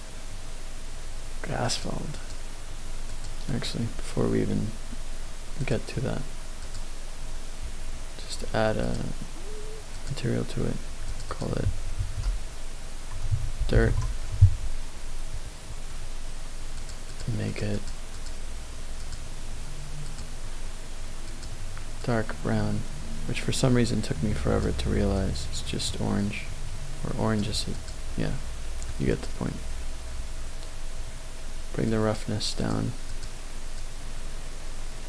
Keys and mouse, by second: 1.7 click, 2.1 click, 3.1 click, 5.7 click, 6.6-8.9 drag, 10.0-10.4 drag, 11.1-14.2 drag, 16.8 click, 17.1 click, 17.4-17.9 drag, 18.3 click, 19.0 click, 20.1 click, 21.2 click, 27.7 click, 28.2-28.9 middle drag, 29.1 click, 31.9-33.2 drag, 33.9-35.0 drag.